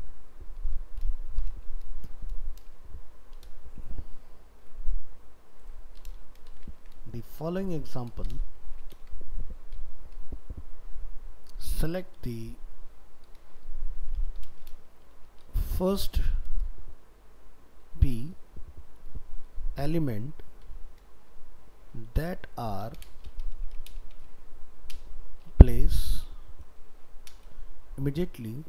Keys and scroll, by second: 6.8 ctrl+c.